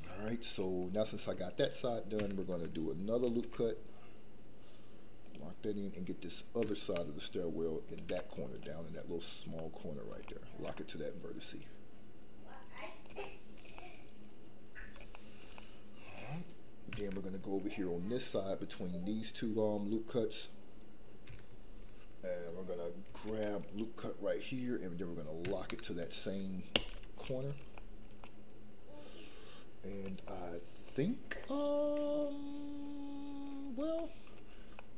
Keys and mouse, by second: 0.3 shift+middle click, 3.2 ctrl+r, 7.8 ctrl+click, 8.4 middle click, 9.5 middle click, 10.3 shift+middle click, 10.9-13.1 middle drag, 13.3 shift+middle click, 13.7-14.9 middle drag, 15.1 shift+middle click, 15.6 middle click, 23.1 ctrl+r, 26.7 ctrl+click, 27.3 middle click, 27.9 shift+middle click, 28.3-30.0 middle drag, 30.3 shift+middle click, 31.5-33.4 middle drag, 34.1 shift+middle click, 34.8-34.9 middle drag.